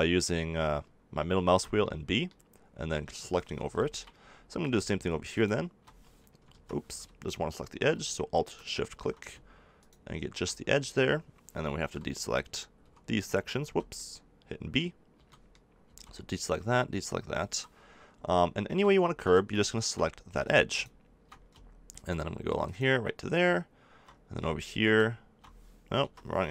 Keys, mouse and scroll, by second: 1.4 b, 3.7 middle click, 4.2 middle click, 6.4 ctrl+z, 7.2-8.4 middle drag, 10.7 middle click, 11.3 middle click, 11.8-13.6 typing, 15.1 b, 15.9 b, 16.6 b, 17.6-19.2 middle drag, 19.2 right click, 19.7 middle click, 25.9 ctrl+z.